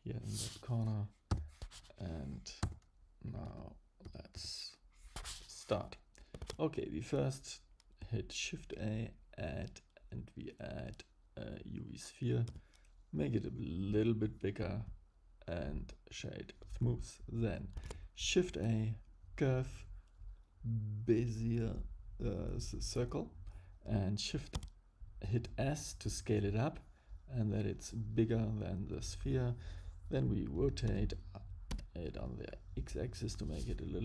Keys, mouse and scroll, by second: 3.4 n, 4.0 n, 4.3 n, 6.4 shift+a, 12.5 s, 15.2 right click, 17.7 shift+a, 24.5 s, 30.8 r.